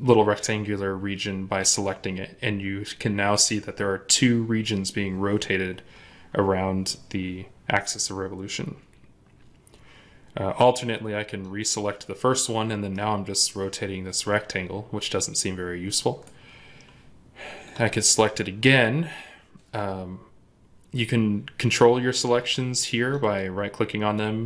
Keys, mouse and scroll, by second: 12.6 scroll up 1, 12.8 middle click, 23.1 right click.